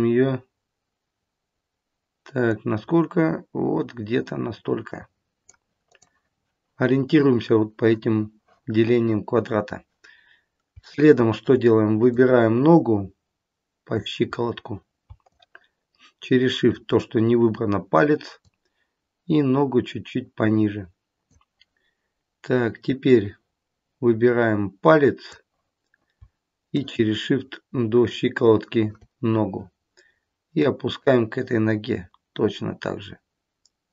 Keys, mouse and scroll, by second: 2.3 click, 5.8 click, 10.7 shift+middle click, 12.1 click, 14.2-14.7 scroll up 4, 15.2 shift+click, 23.0 click, 26.7 shift+click, 30.5 click.